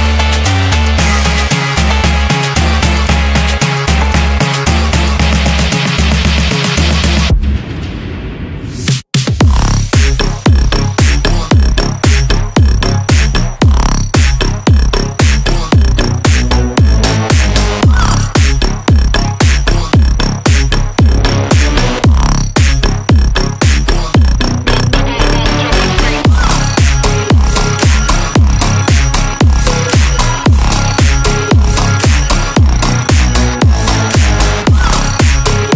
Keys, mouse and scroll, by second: 0.4 g, 4.5 shift+a, 7.4-7.7 shift+middle drag, 9.7 click, 10.9 middle click, 11.6 shift+a, 16.8-17.2 drag, 17.7 click, 19.4-19.8 scroll up 1, 21.0-22.6 shift+drag, 21.0 scroll up 1, 23.7-24.9 shift+drag, 26.0 shift+a, 31.5 scroll up 1, 33.6-35.7 drag.